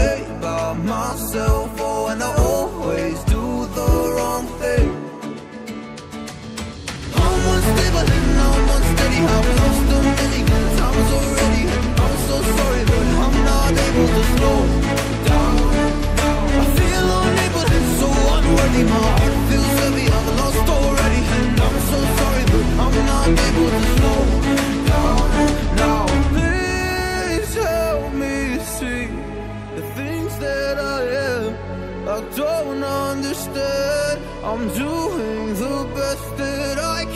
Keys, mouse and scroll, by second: 0.2 click, 1.5 shift+click, 2.3 double click, 2.8 click, 5.5 scroll down 1, 7.7 scroll down 1, 8.2 scroll up 1, 10.4 scroll down 1, 10.9 scroll up 1, 11.6 click, 12.9 double click, 17.6 scroll down 1, 18.2 scroll up 1, 18.7 scroll down 1, 19.8 scroll up 1, 20.3 scroll down 1, 22.7 scroll up 1, 23.4 scroll down 1, 24.4 click, 25.2 shift+click, 26.0 shift+click, 28.9 double click, 29.4 click, 31.6 Right, 34.7 click, 35.7 scroll up 1.